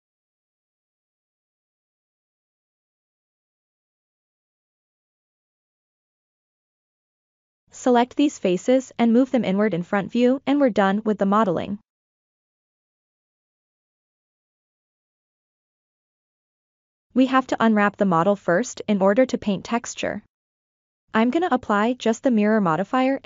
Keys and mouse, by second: 0.3 shift+middle click, 2.6 click, 3.4 Tab, 4.3 3, 4.6 middle click, 5.7 shift+click, 7.4 ctrl+KP_Add, 8.1-9.3 middle drag, 12.2 KP_1, 12.2 r, 12.8-15.2 drag, 15.8 g, 16.1-17.9 drag, 18.6 middle click, 19.7 Tab, 20.7 click, 21.8 ctrl+a.